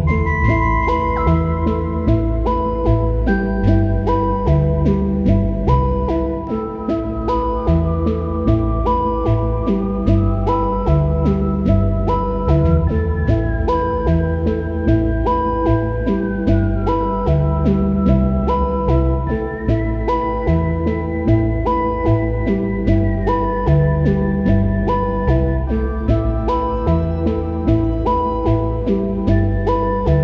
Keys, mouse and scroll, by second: 0.7-6.9 drag, 15.6 alt+click, 18.7-23.3 drag, 23.3 ctrl+z, 23.9-25.5 drag, 25.5 ctrl+t, 25.6-28.2 drag, 28.2 typing, 28.7 click, 29.2 ctrl+z, 29.8-30.2 drag.